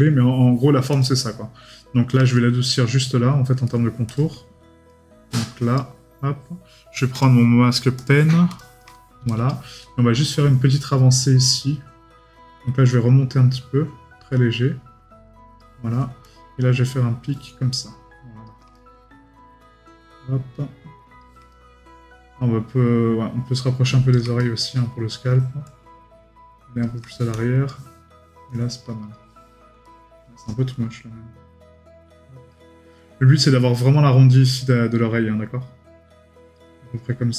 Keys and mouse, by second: 2.3 right click, 3.6 right click, 18.7 right click, 21.5 right click, 24.4 right click, 29.8 right click.